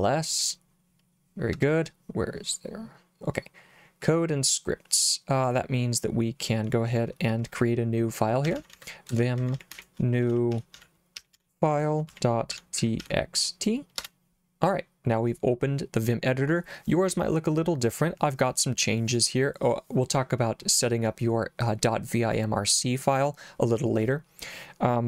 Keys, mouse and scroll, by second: 0.0-0.1 typing, 1.6 Return, 8.3-13.6 typing, 14.0 Return.